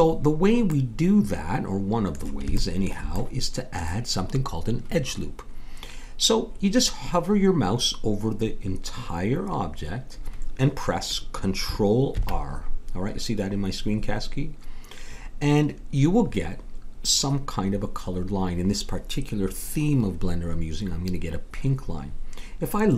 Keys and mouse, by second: 0.7-2.0 middle drag, 12.1 ctrl+r.